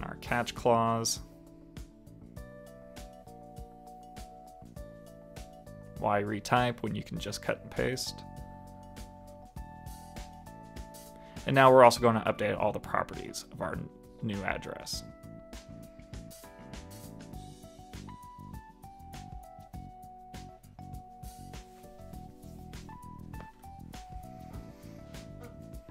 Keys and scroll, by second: 2.1 super+c, 4.5 super+v, 5.1 super+s.